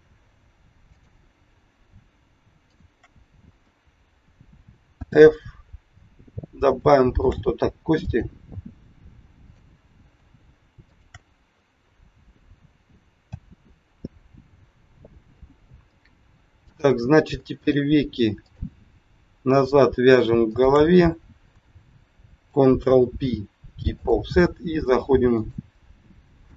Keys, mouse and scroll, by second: 0.9 click, 2.6 shift+click, 2.9 shift+click, 4.9 f, 6.4 scroll up 2, 6.8 shift+middle click, 8.0 click, 9.4 click, 10.9 shift+click, 11.1 shift+click, 13.1 f, 14.4-14.8 scroll down 4, 15.3 scroll up 2, 16.5 click, 17.5 shift+click, 18.2 click, 19.6 shift+click, 20.4 shift+click, 22.6 ctrl+p, 25.3 click.